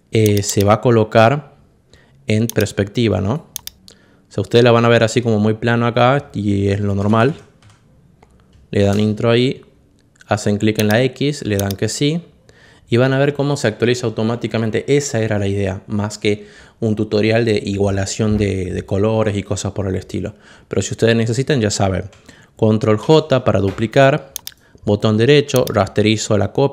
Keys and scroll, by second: 6.7 Down, 7.5 Left, 8.7 Return, 22.9 ctrl+j.